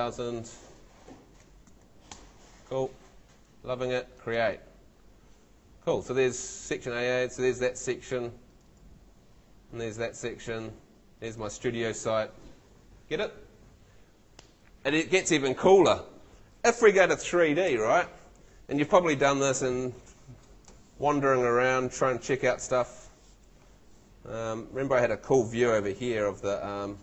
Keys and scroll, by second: 0.8-2.2 typing, 17.7 F3, 24.3 w.